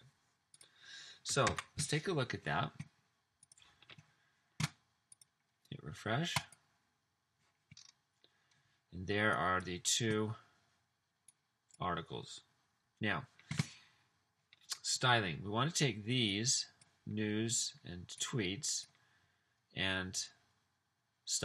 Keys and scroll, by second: 1.5 super+s.